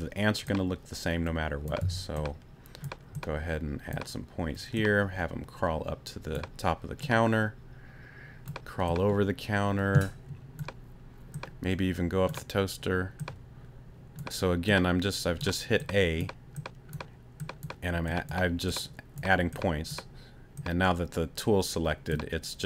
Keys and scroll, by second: 1.8 a.